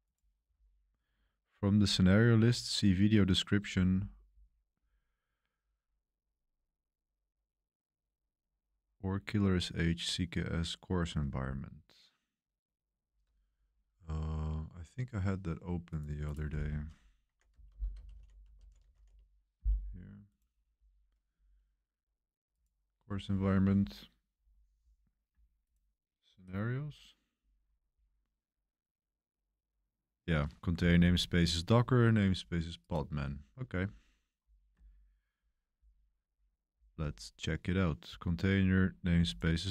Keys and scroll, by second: 17.0-19.3 typing, 21.0 typing.